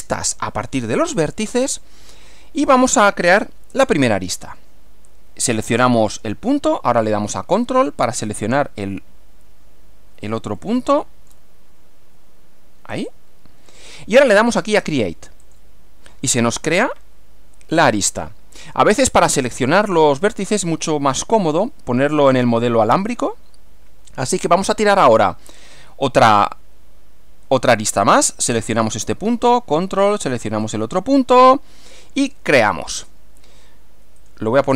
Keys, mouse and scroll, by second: 6.1 click, 10.6 ctrl+middle click, 12.9 ctrl+click, 15.4 click, 18.0-19.9 middle drag, 21.1 click, 22.4 click, 28.8 click, 30.6 ctrl+click, 32.3 click, 34.2 click.